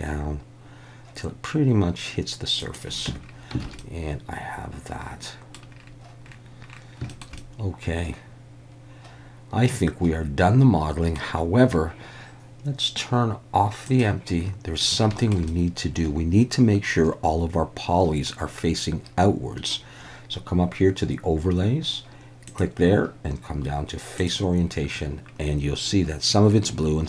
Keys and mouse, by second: 2.6 click, 3.1 Tab, 3.6 alt+a, 3.8-5.6 middle drag, 7.1 shift+middle drag, 7.4-11.2 middle drag, 13.9 click, 15.2 shift+middle click, 15.5-18.3 middle drag, 22.6-24.6 drag.